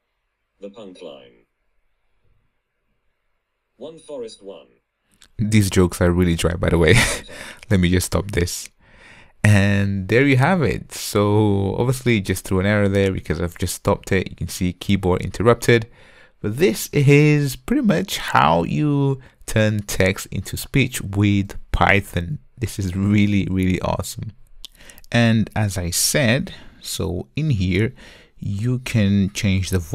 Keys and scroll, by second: 8.4 super+F2.